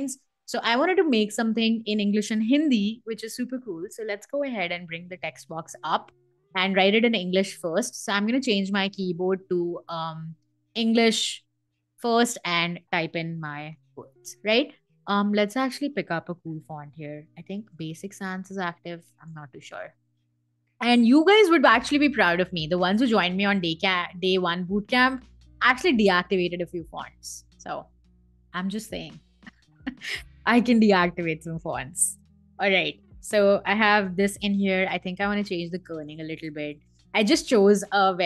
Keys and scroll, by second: 4.3 t, 12.7-14.1 typing, 17.0-19.2 typing.